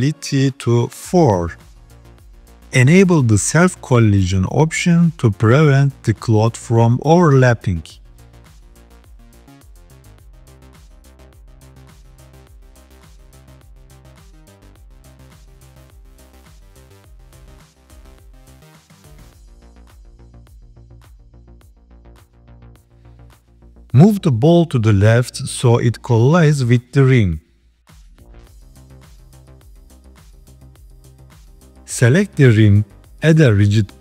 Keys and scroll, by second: 26.2 KP_3, 27.5 g.